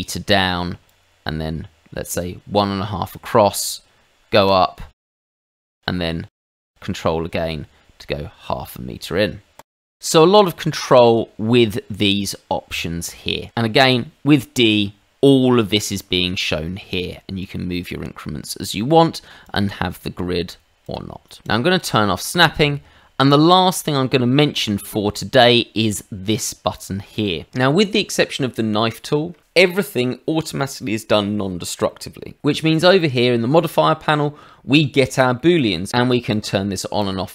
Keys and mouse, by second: 0.8 ctrl+click, 4.4 click, 5.1 ctrl+click, 5.7 middle click, 9.5 ctrl+click, 9.8 middle click, 11.0 click, 13.8 d, 17.4 click, 18.7 Escape, 19.4 click, 20.8 click, 21.4 click, 24.1 middle click, 24.7 shift+middle click, 25.1 middle click, 35.4 shift+middle click, 36.3 click, 36.9 click.